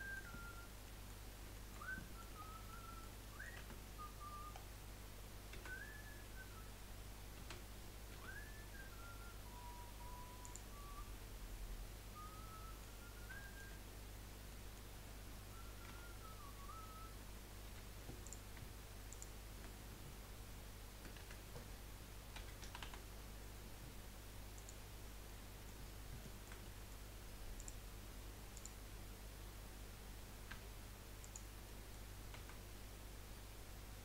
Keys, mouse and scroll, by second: 0.3 Tab, 1.0-1.8 middle drag, 2.4 scroll down 3, 2.7 middle click, 3.2 middle click, 3.6 Tab, 3.9-4.5 scroll up 2, 4.5-5.5 scroll down 2, 5.5 a, 7.4 s, 10.8-13.0 middle drag, 13.0-13.4 scroll up 2, 13.4-15.9 shift+middle drag, 15.9 2, 17.7 1, 18.2 click, 19.1 shift+click, 21.2 F3, 25.3-27.5 middle drag, 27.5 click, 28.5 click, 30.5 g, 31.6 middle click, 32.3 a.